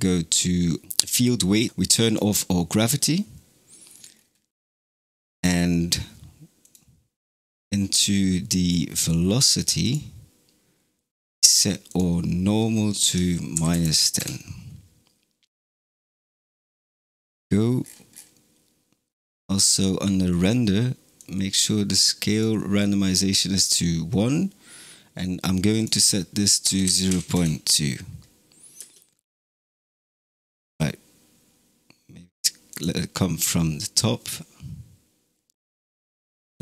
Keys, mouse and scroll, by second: 0.8 click, 0.9-1.7 scroll down 6, 1.7-4.0 drag, 4.0-5.2 scroll up 5, 6.5-7.4 drag, 7.4 scroll up 2, 7.9 scroll down 3, 8.5-9.7 scroll up 5, 9.7-14.8 drag, 17.7-19.1 scroll down 11, 19.1-21.0 scroll up 2, 21.0-24.2 drag, 25.6-28.6 drag, 28.6 space, 30.4 g, 36.1 space.